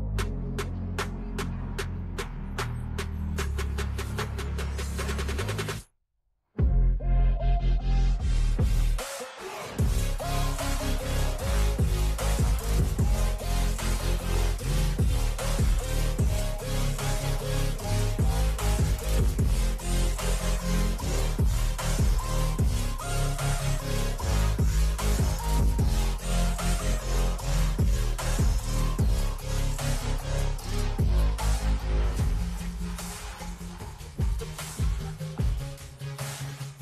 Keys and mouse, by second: 19.9 click, 22.0 click, 23.9 Left, 24.4 Down, 24.6 Down, 25.6 Right, 26.1 Left, 26.9 click, 28.4 click, 29.2 click, 29.6 click, 30.6 Down, 30.7 Down, 31.0 Down, 31.3 Down, 31.7 Down, 32.6 Return.